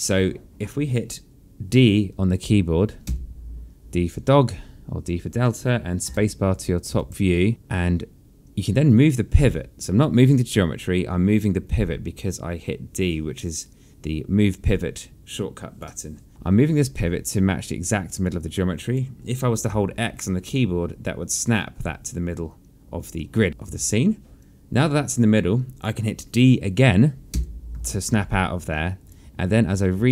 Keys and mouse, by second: 0.7 alt+click, 3.8 d, 6.8 space, 9.8 click, 18.9 click, 20.4 x, 23.8 space, 25.1 alt+click, 28.0 d, 28.5 alt+click.